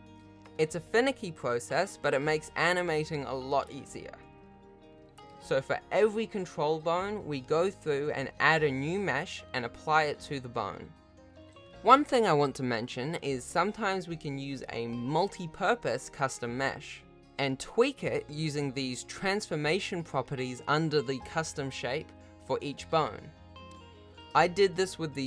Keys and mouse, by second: 0.3 g, 1.9 ctrl+z, 2.8 click, 3.1 g, 4.2 Tab, 4.7 Tab, 4.9 Tab, 4.9 shift+middle click, 5.0 ctrl+s, 5.0 alt+z, 5.1 alt+z, 5.1 ctrl+s, 5.4 ctrl+Tab, 5.4-7.3 typing, 5.5 ctrl+s, 5.8 shift+middle click, 6.0 F2, 6.5 shift+click, 6.6 shift+click, 6.7 ctrl+z, 6.7 right click, 7.0 shift+Left, 7.0 ctrl+Tab, 7.2 ctrl+s, 7.3 ctrl+s, 7.3 middle drag, 7.4 ctrl+Tab, 7.9 shift+middle click, 8.5 alt+a, 8.7 alt+shift+click, 9.3 alt+click, 9.5 alt+a, 9.5 g, 9.7 ctrl+s, 9.8 shift+click, 10.1 ctrl+s, 10.3 alt+shift+click, 10.5 g, 10.5 alt+a, 10.5 ctrl+s, 10.5 shift+middle drag, 10.6 alt+a, 10.7 ctrl+s, 11.0 g, 11.1 shift+middle click, 11.6 shift+Left, 11.6 ctrl+Tab, 11.6 shift+middle click, 12.2 ctrl+s, 12.9 shift+middle click, 13.7 g, 14.2 s, 15.5 g, 16.6 ctrl+s, 17.4 shift+middle click, 19.1 click, 19.4 ctrl+Tab, 19.8 alt+shift+a, 20.1 shift+click, 22.0-24.8 alt+drag.